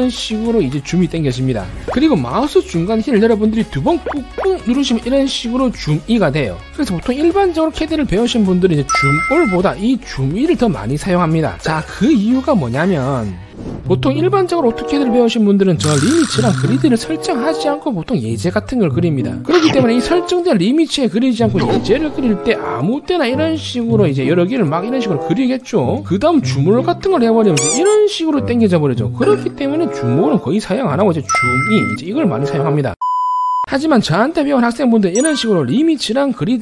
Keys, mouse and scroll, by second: 0.7 e, 4.3 middle click, 4.5 middle click, 12.4 scroll down 1, 12.7 middle click, 14.0 right click, 20.9-21.3 scroll down 2, 21.6 middle click, 22.0 middle click, 22.6 c, 22.7 right click, 23.0 click, 23.3 click, 23.8 c, 24.0 right click, 24.0 c, 24.2 click, 24.4 click, 24.5 right click, 24.7 click, 25.4 click, 25.8 click, 26.6 z, 26.9 right click, 27.3 a, 27.6 right click, 29.5 middle click, 31.2 z, 31.4 right click, 31.8 e, 32.1 right click.